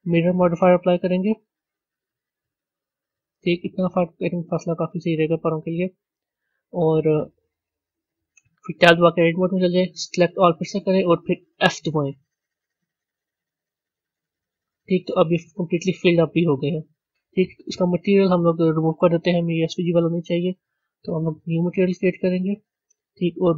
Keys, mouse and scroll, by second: 9.0 b, 15.4 Tab, 15.9-18.5 middle drag, 18.5 click, 20.1 click, 21.4 click.